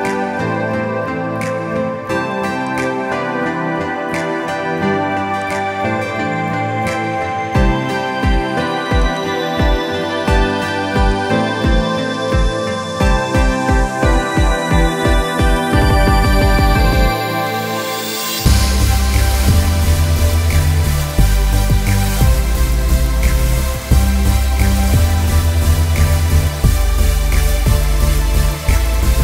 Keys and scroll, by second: 17.0 Escape.